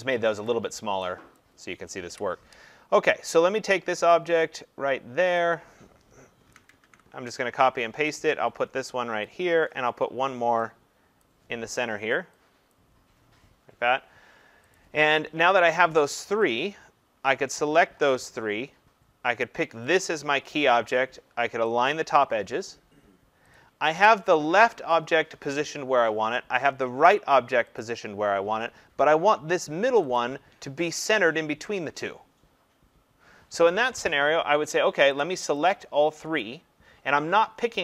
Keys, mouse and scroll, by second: 0.5 click, 1.4 click, 2.1 Delete, 5.4 click, 6.5 ctrl+c, 6.9 ctrl+v, 9.3 click, 9.6 ctrl+v, 11.2 click, 12.8 click, 14.8 click, 17.6 click, 20.0 click, 21.9 click, 27.8 click, 30.2 click, 35.2 click, 36.4 click.